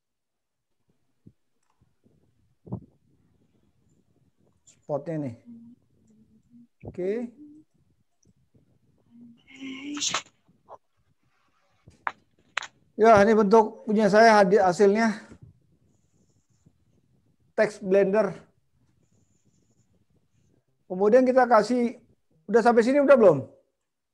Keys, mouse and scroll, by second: 20.7 middle click.